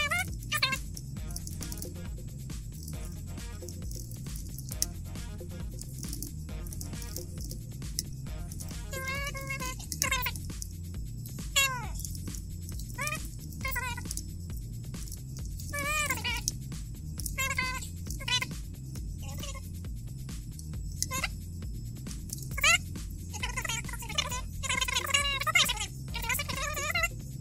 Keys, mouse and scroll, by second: 0.0-10.0 typing, 12.9-18.2 typing, 19.3 click, 19.9 click, 22.4 c, 23.0 BackSpace, 24.1 click, 24.7 scroll down 4.